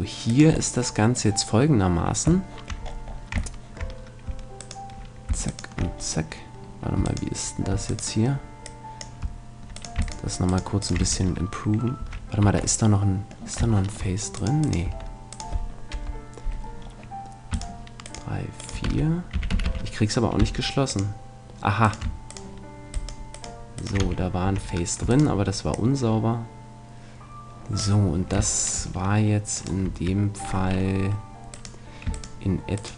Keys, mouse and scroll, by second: 0.4-2.2 drag, 2.0-4.6 middle drag, 4.6-6.0 drag, 4.6-9.6 right drag, 8.6-10.4 drag, 9.8-12.8 right drag, 11.0 f, 12.0 a, 12.4 Tab, 14.8 Tab, 15.9 KP_Decimal, 18.8-20.4 typing, 21.8-26.8 right drag, 24.0 f, 24.4 a, 25.7-27.4 drag, 28.5-31.2 middle drag, 29.6-31.3 right drag, 31.5-32.9 right drag.